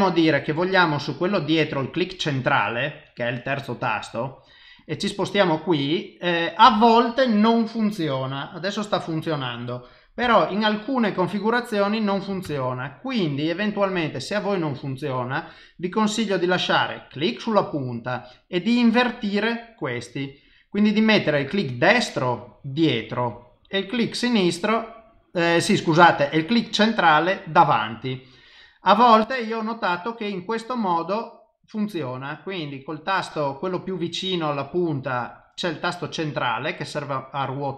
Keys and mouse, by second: 5.0 click, 5.5 middle click, 8.8 middle click, 10.2 KP_0, 29.2 click, 31.5 middle click, 33.2 middle click, 35.0 middle click, 37.2 middle click.